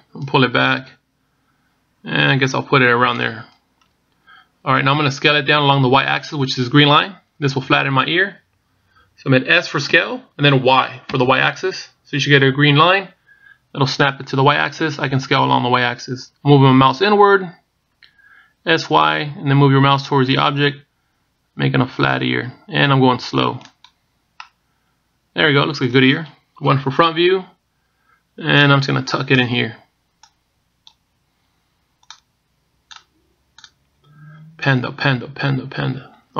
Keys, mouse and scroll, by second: 0.4 click, 10.8 s, 25.2 middle click, 27.5 KP_1, 29.6 click, 31.1 click, 32.9 click, 34.5 click.